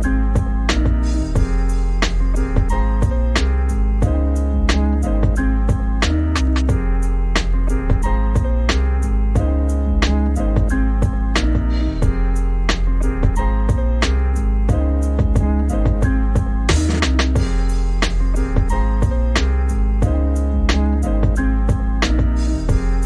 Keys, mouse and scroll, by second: 0.0 s, 0.2 middle click, 0.4 ctrl+z, 0.6 click, 0.6 middle click, 0.9 KP_3, 1.2 middle click, 1.4 s, 1.9 middle click, 2.3 click, 2.5 g, 2.9 middle click, 3.2 g, 3.7 click, 3.7 Tab, 3.9 scroll down 3, 4.0 scroll up 4, 4.2 g, 4.8 click, 5.0 g, 5.3 g, 5.8 Tab, 6.1 click, 6.9 click, 9.6 Tab, 9.9 click, 10.3 g, 11.8 Tab, 12.0 click, 12.6-13.1 scroll up 1, 13.1 click, 13.7 click, 15.4 middle click, 15.7-16.1 scroll up 1, 16.1 g, 16.7 middle click, 17.1 g, 17.9 g, 18.4 middle click, 19.2 click, 20.2 ctrl+2, 20.4 click, 21.4 click, 23.0 click.